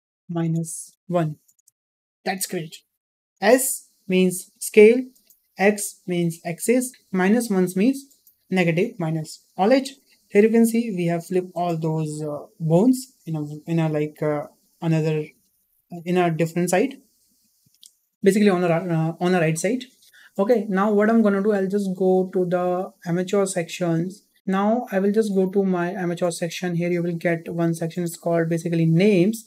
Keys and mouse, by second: 23.0 click, 26.0-29.4 drag.